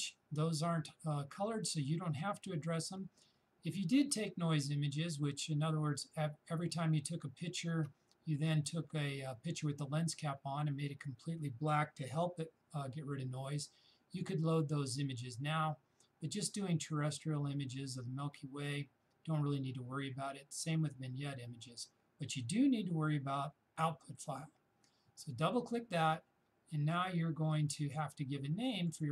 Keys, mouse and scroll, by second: 25.2-29.1 shift+drag.